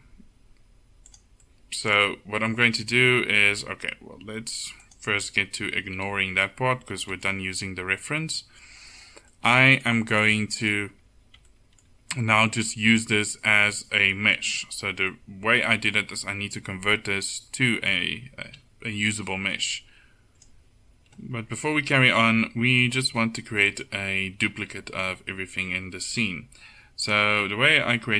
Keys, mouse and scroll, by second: 6.3 KP_1, 10.1 Tab, 10.9 Tab, 20.3 a.